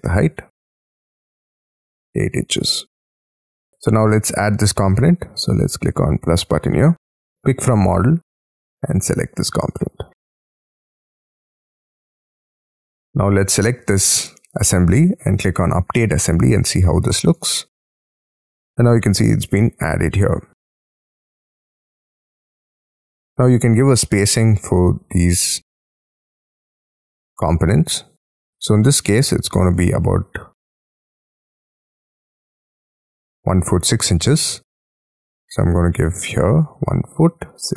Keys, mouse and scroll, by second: 0.4 scroll up 5, 1.9 space, 2.1-7.5 scroll down 10, 11.6-12.5 scroll down 26, 12.5 middle click, 12.9 Escape, 13.7-18.4 scroll up 5, 18.4-19.6 scroll up 19, 19.6 middle click, 20.6 scroll down 19, 20.9 middle click, 21.1 middle click, 21.9 scroll up 1, 22.1 middle click, 22.4-24.0 scroll down 11, 24.0 middle click, 24.3-24.9 scroll down 5, 24.9-26.7 scroll up 10, 29.7 middle click, 30.2 scroll up 5, 30.3 t, 33.7-35.2 scroll down 15, 35.2 1, 36.3 double click, 36.5-37.7 typing.